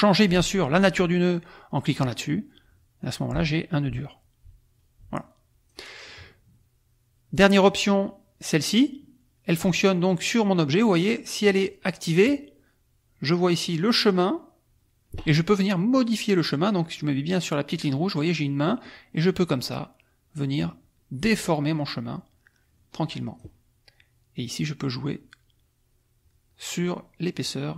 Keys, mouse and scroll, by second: 1.9 click, 3.0 click, 3.9-5.9 drag, 7.7 click, 12.0 click, 18.8-23.5 drag, 24.3-27.4 drag.